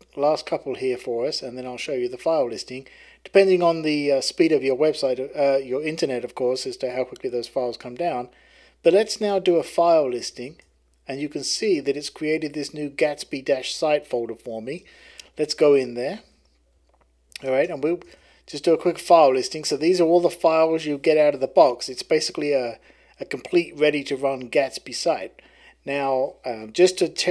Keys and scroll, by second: 8.6-10.8 typing, 12.3-13.0 typing, 14.3-18.4 typing, 16.2 Return, 19.6-20.4 typing.